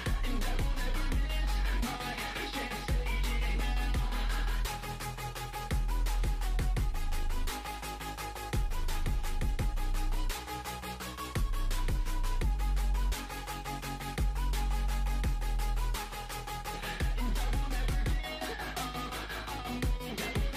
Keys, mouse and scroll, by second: 0.0-0.6 scroll up 7, 0.3 shift+middle click, 0.8 f, 1.5-2.5 ctrl+drag, 2.5 ctrl+z, 3.0 ctrl+z, 3.6 ctrl+z, 4.2 ctrl+z, 4.4 scroll down 8, 5.0-6.0 shift+middle drag, 6.0 scroll down 3, 6.5-8.0 middle drag, 8.0 scroll up 2, 8.1-9.8 middle drag, 9.8 click, 10.0-11.5 middle drag, 11.5 click, 12.1 ctrl+z, 12.3 KP_3, 12.5-13.5 scroll up 4, 12.7 shift+middle click, 13.1 shift+middle click, 13.5 shift+middle click, 14.2 scroll down 1, 14.5 ctrl+click, 15.3 scroll down 1, 15.6 shift+middle click, 16.4-17.4 ctrl+drag, 17.4 scroll down 1, 17.5 shift+middle click, 18.0 scroll up 2, 18.1 shift+middle click, 18.5-19.6 ctrl+drag, 20.2 scroll down 7, 20.4 shift+middle click.